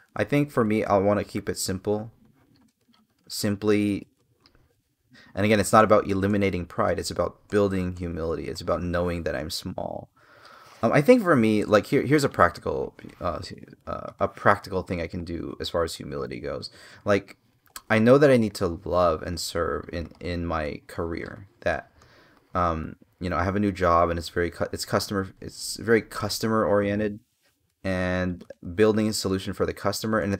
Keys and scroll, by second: 5.5 space, 7.0 space, 11.3 space.